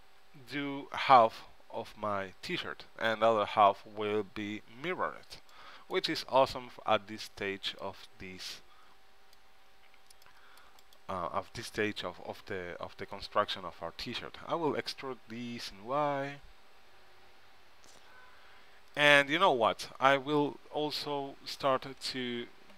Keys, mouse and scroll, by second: 1.4 Tab, 4.8-7.0 middle drag, 7.0 c, 14.8 e.